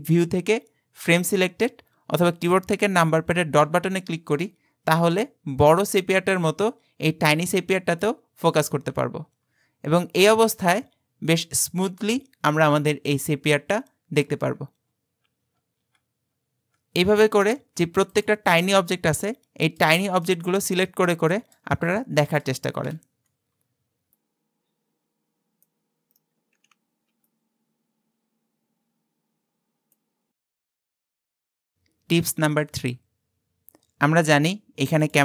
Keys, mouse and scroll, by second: 3.6 KP_Decimal, 5.1-7.6 middle drag, 7.6-8.4 scroll down 7, 8.5-8.9 scroll down 5, 8.9-10.0 scroll up 11, 10.0-10.4 scroll up 5, 10.4-10.8 scroll down 4, 10.8-13.8 middle drag, 14.5-18.1 scroll down 40, 18.1 click, 18.7-19.1 scroll down 4, 19.2-21.7 middle drag, 21.7-22.2 scroll up 4, 22.2-22.9 shift+middle drag, 22.9 KP_Decimal, 23.5-24.2 scroll down 9, 24.2-25.8 middle drag, 26.1 click, 26.7 KP_Decimal, 27.1 scroll down 3, 27.3-28.9 middle drag, 35.1 click.